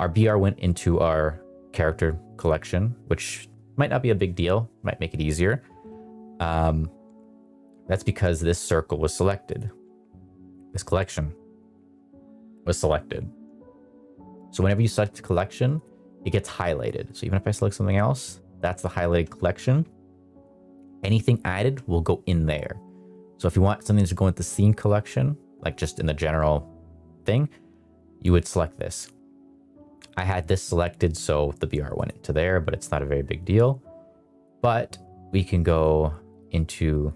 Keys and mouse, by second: 15.7 click, 28.8 click, 31.9 click, 33.5 click, 35.2-35.8 drag, 36.2 drag, 37.0-37.1 drag.